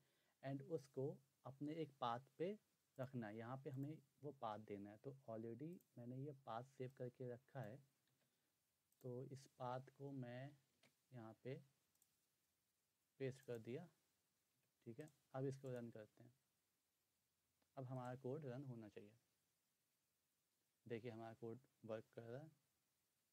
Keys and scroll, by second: 8.1 ctrl+c, 10.4 ', 10.8 ctrl+v, 14.5 typing, 22.8 typing.